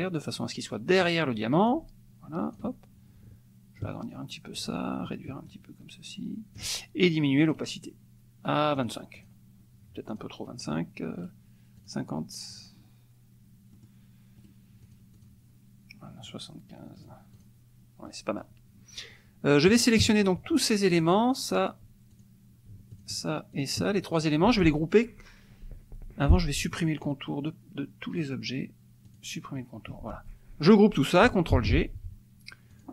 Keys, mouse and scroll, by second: 1.6-2.8 ctrl+drag, 3.8 shift+click, 5.4-6.8 shift+drag, 7.6 right click, 8.7 click, 9.1 click, 10.1 click, 11.2 right click, 11.8 click, 12.5 click, 13.8 middle click, 14.5 right click, 14.8 click, 16.2 right click, 17.1 click, 17.4 click, 18.1 middle click, 20.0 KP_Subtract, 20.9 click, 22.1 shift+click, 22.9 shift+click, 23.5 shift+click, 28.1 right click, 29.1 click, 31.5 ctrl+g, 32.7 click.